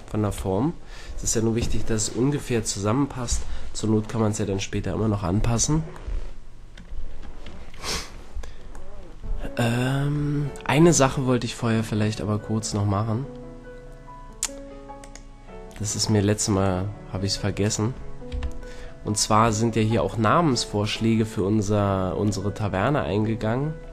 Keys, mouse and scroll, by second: 0.3 KP_1, 6.1-11.6 middle drag, 15.0-17.1 drag, 16.9-17.4 middle drag, 17.7 right click, 18.3 KP_Decimal, 18.5-20.5 middle drag, 22.3-23.9 middle drag.